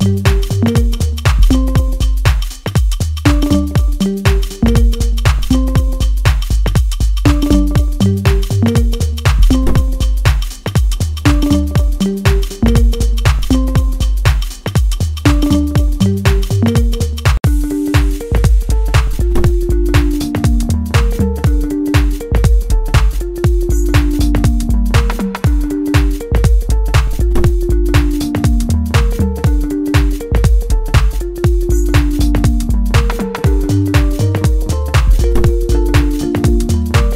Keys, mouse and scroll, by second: 0.9 scroll down 1, 1.2 shift+middle click, 1.9 scroll up 1, 2.4 middle click, 3.7 click, 4.4-9.7 middle drag, 9.7 click, 16.3 click, 17.0-20.4 middle drag, 20.4-21.4 scroll up 1, 22.0-24.0 drag, 24.0-26.0 middle drag, 26.0-30.8 drag, 31.1-32.6 middle drag, 32.6-34.1 drag, 34.8 middle click, 35.9 click, 36.6-37.1 scroll down 1.